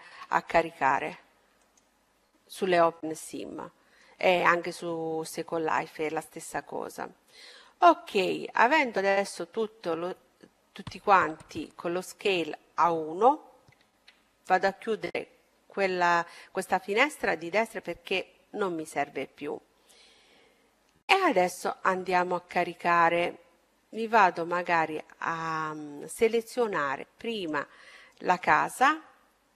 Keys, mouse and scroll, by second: 1.8 ctrl+a, 2.6-5.1 middle drag, 13.8 n, 19.4-23.4 middle drag, 23.4-23.9 scroll up 1, 23.9-26.6 middle drag, 23.9-26.0 right drag, 27.2-29.1 drag, 28.1-29.5 right drag.